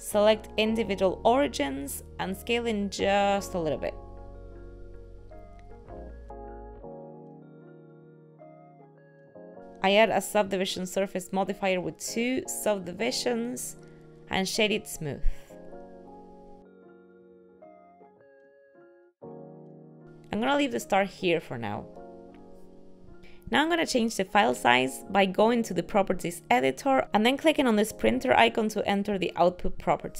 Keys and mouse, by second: 8.1 middle click, 8.7 s, 9.6 click, 13.5 click, 14.9 middle click, 18.1 click, 18.1 a, 20.8 Tab, 27.6 click.